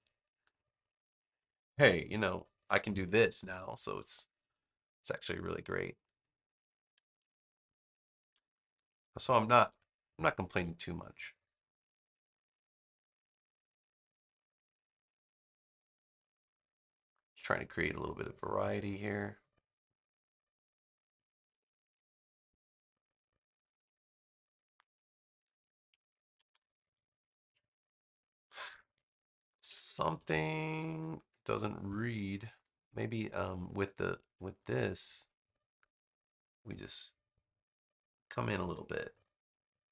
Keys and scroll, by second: 8.2 super+x, 9.2 super+v, 10.5 v, 26.4 super+-, 29.3 super+-, 30.0 super+=, 31.8 space.